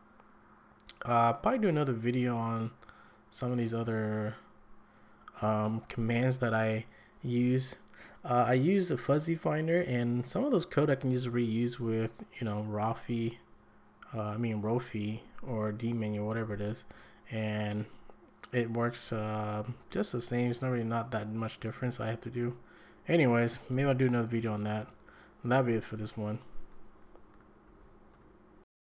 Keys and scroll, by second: 27.6 ctrl+a, 28.1 1.